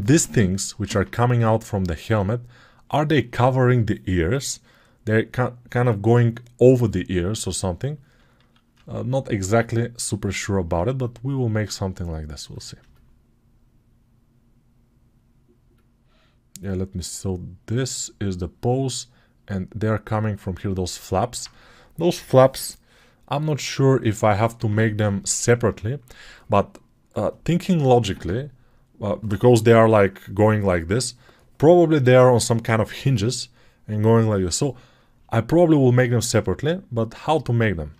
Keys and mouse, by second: 0.7 alt+q, 0.7-3.7 alt+drag, 7.5-15.6 alt+drag, 8.2 alt+q, 10.0 alt+q, 15.6 alt+right click, 18.4-37.9 drag.